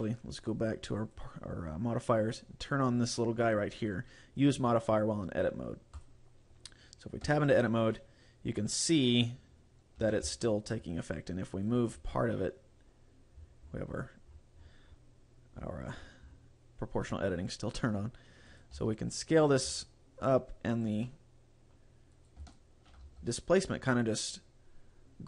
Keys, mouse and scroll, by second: 1.1 click, 6.1 click, 7.4 Tab, 8.0 middle click, 10.1 a, 10.3 c, 11.9 right click, 12.1 g, 18.7 click, 18.8 s, 19.5 right click, 19.7 s, 20.9 click, 21.1 middle click, 22.3 right click, 23.1 g.